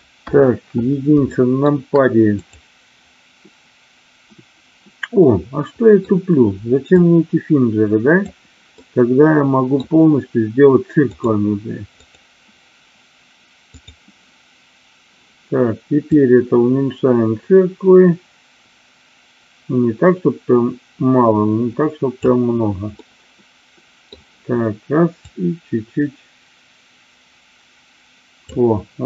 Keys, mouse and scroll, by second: 0.2 KP_1, 1.3 shift+middle click, 2.3-3.6 drag, 5.1 middle click, 7.0-8.3 drag, 8.6-9.6 middle drag, 11.0-12.2 drag, 16.0-22.1 drag, 23.0-24.2 middle drag, 25.1-28.4 drag.